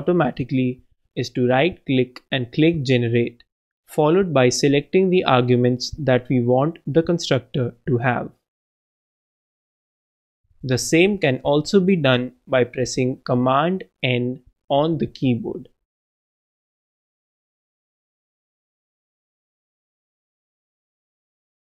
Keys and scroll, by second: 0.6 super+Up, 0.7 super+Right, 1.2 super+Return, 10.8 ctrl+Return, 12.0 ctrl+Return, 13.4 ctrl+Return, 19.3 super+Up, 19.4 super+BackSpace, 19.7 super+Down, 19.9 super+BackSpace.